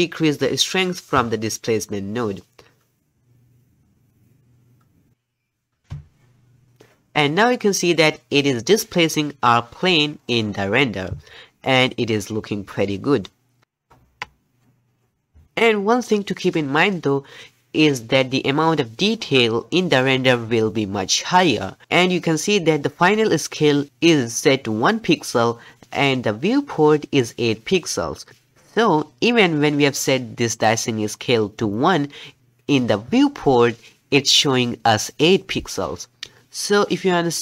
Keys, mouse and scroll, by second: 1.2-4.3 shift+drag, 7.4-8.8 middle drag, 8.8 scroll up 1, 9.0-13.6 middle drag, 14.0 KP_0.